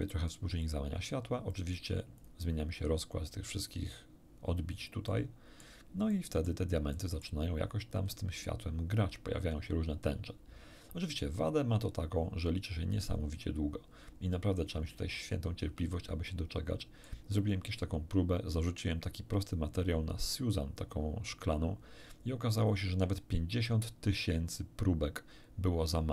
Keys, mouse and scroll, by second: 0.6 click, 1.5 click, 2.2 click, 5.1 middle click, 6.1 middle click, 6.9 middle click, 13.1-13.6 scroll up 1, 14.0 middle click, 14.8-15.2 scroll up 1, 16.3-17.3 shift+middle drag.